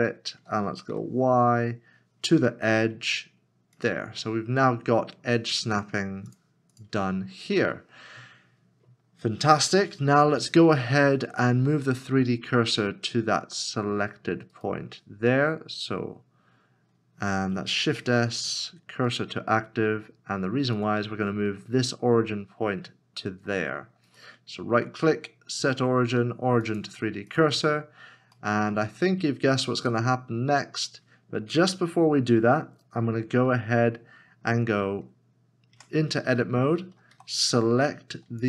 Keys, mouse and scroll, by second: 2.3 y, 2.4 e, 4.8 scroll down 1, 14.5 right click, 17.8 shift+s, 24.1 right click, 28.5 shift+middle click, 30.4 scroll up 1, 37.1 Tab, 37.3 2.